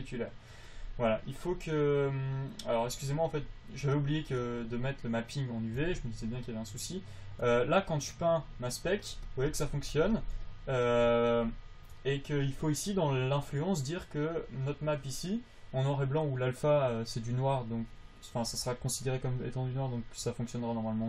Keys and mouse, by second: 8.7-11.3 drag.